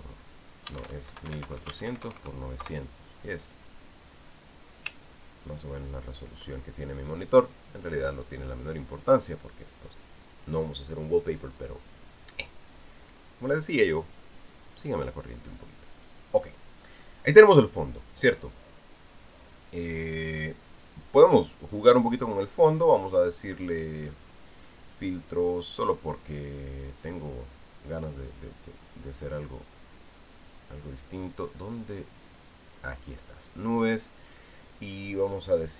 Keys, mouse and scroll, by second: 1.6 shift+Tab, 2.0 shift+KP_4, 2.2 shift+KP_0, 2.5 shift+Tab, 2.8 shift+KP_0, 3.4 shift+KP_Enter, 6.1 ctrl+scroll down 2, 6.6 ctrl+scroll up 2, 23.7 click.